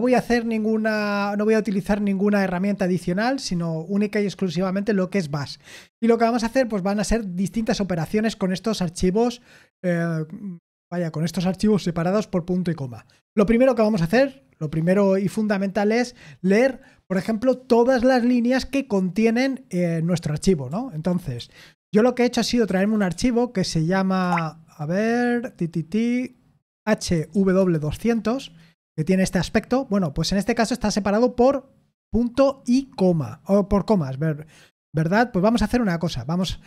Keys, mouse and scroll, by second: 20.7 super+l, 21.3 super+l, 22.4-23.5 typing, 24.2 Tab, 26.9-27.8 typing, 28.4 Return.